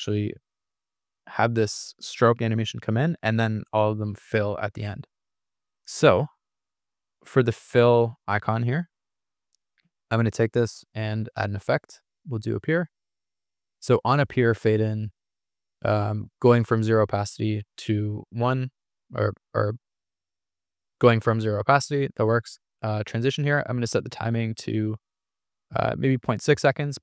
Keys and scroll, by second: 2.3 super+=.